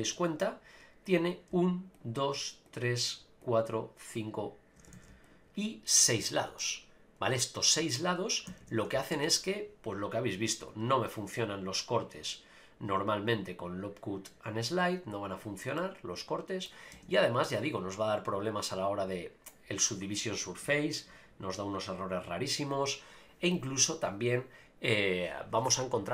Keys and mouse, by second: 0.1 click, 2.0 shift+click, 4.9 ctrl+z, 5.3 shift+click, 6.6-7.7 middle drag, 8.5 a, 8.6 a, 9.1 ctrl+r, 15.8 middle click, 16.9 Tab, 17.8-18.9 drag, 20.6 Tab, 21.1 Tab, 22.8-24.1 drag.